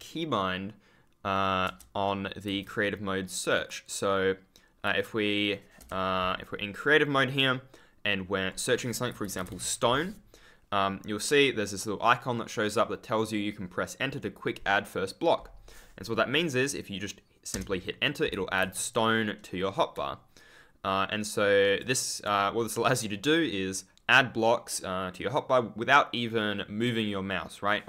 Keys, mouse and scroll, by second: 2.4 e, 3.5 click, 5.7 BackSpace, 9.1-9.9 typing, 17.4 Return, 18.2 w, 21.6 shift+click.